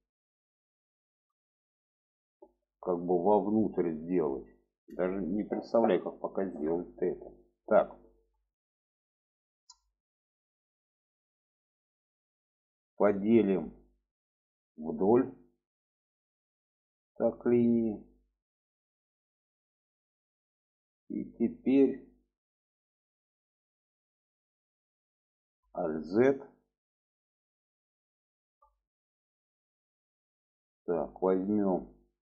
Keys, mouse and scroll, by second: 1.0 shift+middle click, 2.1 shift+middle click, 3.3 shift+middle click, 5.6-7.6 middle drag, 8.0 shift+middle click, 9.1-12.6 middle drag, 13.1 middle click, 14.6 click, 16.0 click, 16.6 middle click, 19.6 shift+middle click, 20.7 shift+middle click, 25.9 alt+z, 28.3 middle click, 29.2-30.5 middle drag.